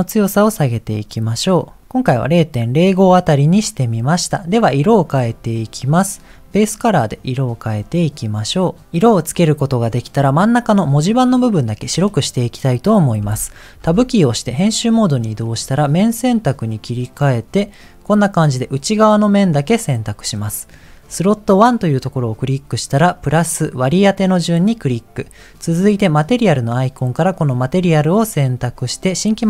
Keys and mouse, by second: 3.9 middle click, 5.4 middle click, 6.3 click, 10.1 middle click, 13.8 Tab, 16.8 click, 20.7-25.2 drag, 25.8-27.9 drag.